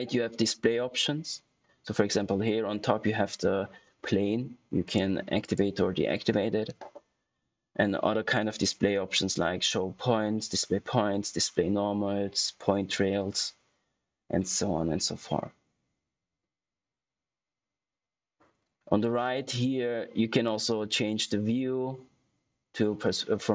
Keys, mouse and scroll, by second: 4.8 click, 20.4 click, 22.7 typing.